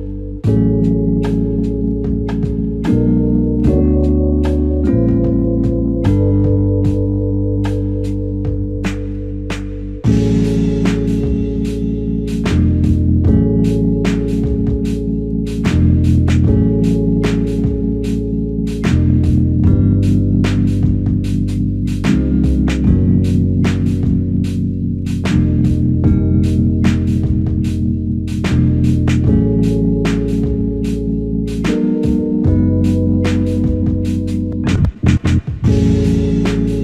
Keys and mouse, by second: 11.8 alt+click, 19.3-20.0 s, 20.4 s, 27.9 typing, 36.0 double click.